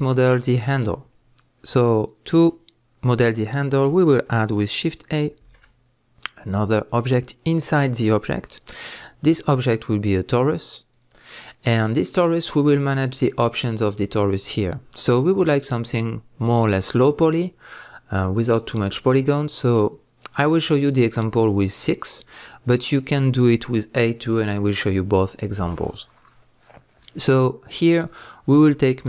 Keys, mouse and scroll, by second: 0.2 scroll up 2, 0.3-4.5 middle drag, 12.3-13.1 middle drag, 13.1 click, 28.0-29.0 drag.